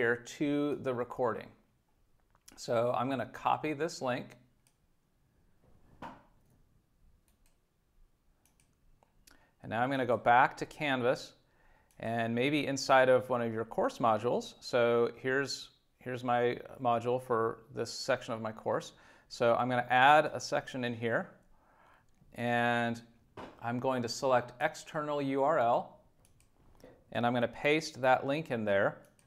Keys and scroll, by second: 27.4 super+v.